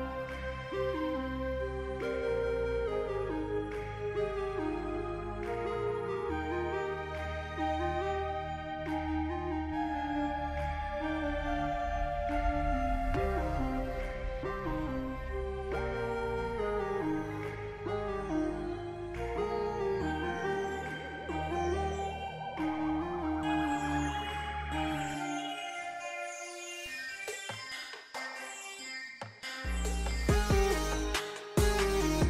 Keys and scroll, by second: 15.7 j, 31.9 z.